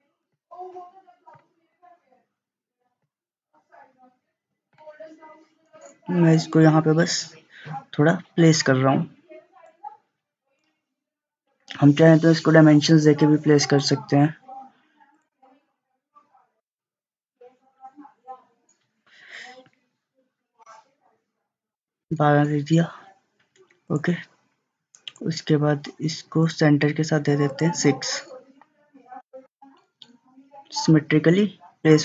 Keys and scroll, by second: 21.6-21.9 typing, 22.2 Return, 29.3 6, 29.5 6, 29.6 Return.